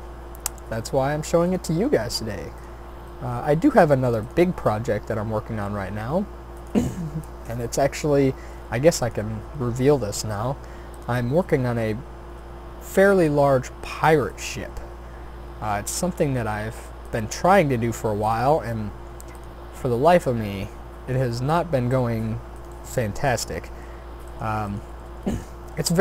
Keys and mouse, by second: 0.7 s, 1.6 e, 3.8 s, 4.4 e, 7.0 s, 8.0 e, 9.3 s, 12.9 e, 14.9 s, 17.3 e, 18.5 r, 19.9 s, 21.9 g, 25.3 shift+d.